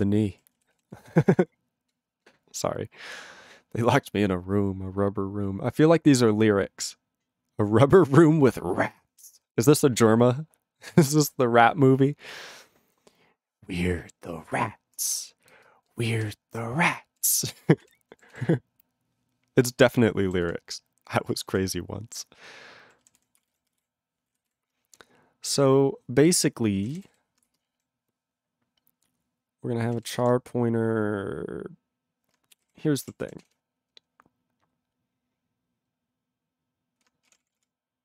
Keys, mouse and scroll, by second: 0.1 ctrl+n, 0.3 ctrl+e, 0.7 ctrl+s, 15.2 ctrl+p, 15.5 ctrl+space, 16.1 ctrl+alt+b, 16.2 ctrl+g, 16.8 ctrl+alt+f, 18.1 ctrl+e, 18.3 ctrl+s, 20.4 ctrl+s, 21.5 ctrl+s, 22.8 ctrl+e, 23.2 ctrl+s, 23.3 ctrl+p, 23.3 ctrl+space, 23.4 ctrl+e, 23.5 ctrl+n, 23.6 ctrl+g, 23.7 ctrl+e, 24.5 ctrl+s, 26.6-27.6 typing, 27.6 ctrl+BackSpace, 28.7 c, 29.9 h, 30.1 space, 30.8 *, 32.6 ctrl+k, 33.0 Tab, 33.5 ctrl+s, 37.3 ctrl+p, 37.6 ctrl+p.